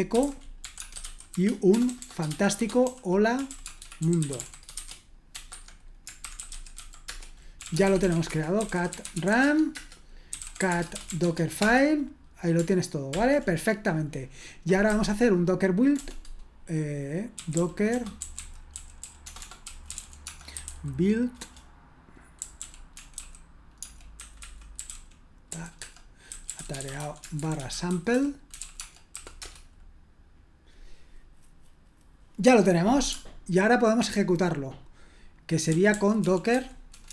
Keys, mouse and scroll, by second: 0.0-13.2 typing, 17.1-29.6 typing, 35.4-37.1 typing.